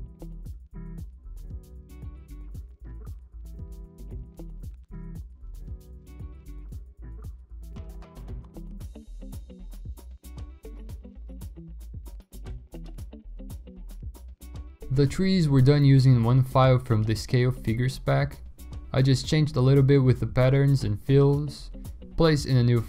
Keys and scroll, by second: 0.0-3.5 typing, 1.5 ctrl+d, 2.5 ctrl+d, 3.4 ctrl+d, 4.4 ctrl+d, 4.9 typing, 5.8 ctrl+d, 8.0-8.4 typing, 8.9 ctrl+d, 13.7 alt+Tab, 15.2 b, 16.3 ctrl+z, 17.6 ctrl+alt+z, 17.9 ctrl+alt+z, 18.5 ctrl+z, 20.9 1, 21.3 ctrl+z.